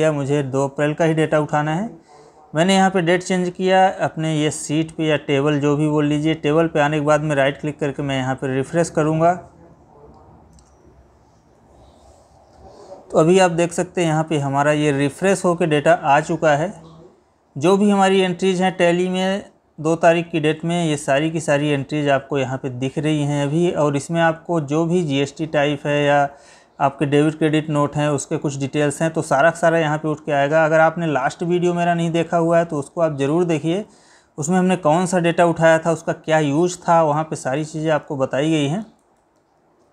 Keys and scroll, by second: 16.9 Left, 17.9 Down, 19.0 Up, 20.2 Down, 23.1 Up, 25.4 Down, 28.9 Up, 32.6 Down, 36.8 Right.